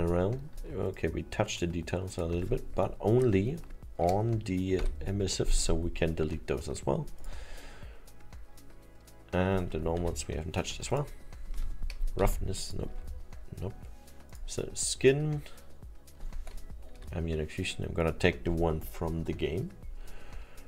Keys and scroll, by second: 4.8 Delete, 10.0 Delete, 12.9 Delete, 17.0 Delete.